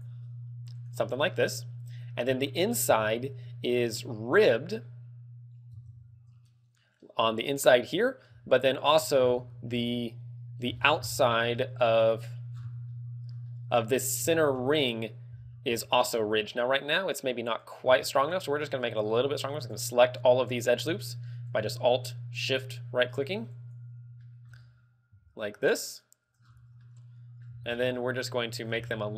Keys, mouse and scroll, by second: 1.0 right click, 1.5 middle click, 2.8 middle click, 5.3 scroll down 3, 6.0 Tab, 7.0 middle click, 8.0 middle click, 8.4 z, 8.8 middle click, 9.4 Tab, 9.5 scroll up 3, 9.9 z, 9.9 middle click, 10.9-11.6 scroll up 6, 11.7 middle click, 12.7 scroll down 6, 13.0 middle click, 13.7 middle click, 14.2 scroll up 3, 14.5 shift+middle click, 15.5-15.9 scroll up 4, 17.7 alt+right click, 18.4 alt+shift+right click, 19.1 alt+right click, 19.8 alt+shift+right click, 20.3 shift+middle click, 20.3 shift+middle click, 21.7 alt+shift+right click, 22.6 alt+shift+right click, 23.7 alt+shift+right click, 24.4 shift+middle click, 24.7 scroll up 4, 26.1 alt+shift+right click, 26.6 scroll down 3, 27.1 middle click, 27.6 z, 27.8 scroll down 3, 28.1 middle click, 28.9 g.